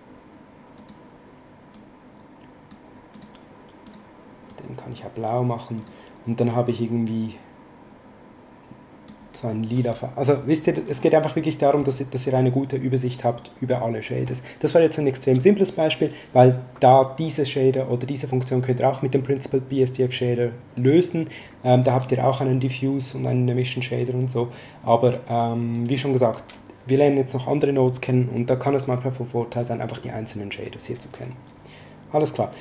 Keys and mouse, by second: 0.7 click, 3.1 click, 5.7 click, 11.3 middle click, 13.7 middle click, 29.9 click, 31.4 click.